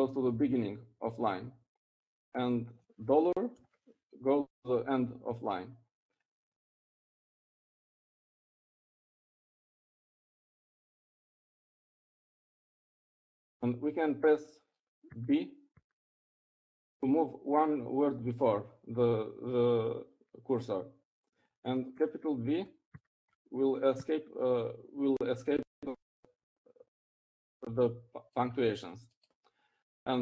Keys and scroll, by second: 0.8 Up, 2.8 0, 6.3 shift+4, 18.2-18.8 typing, 24.8 shift+b, 25.7 b, 26.8 b.